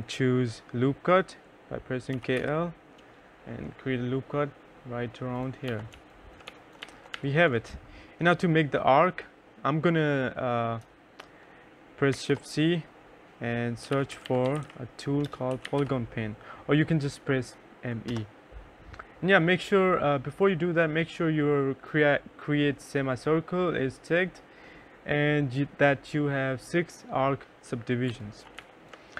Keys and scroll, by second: 1.5 k, 1.8 l, 5.1 F1, 5.3-7.0 typing, 11.5 shift+c, 12.9-15.6 typing, 17.4 Return, 27.4 2, 27.9 3.